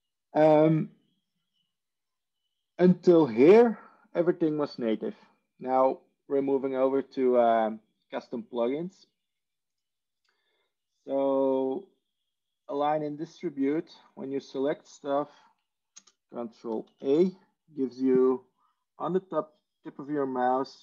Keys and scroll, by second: 16.4 ctrl+space, 16.7 ctrl+a.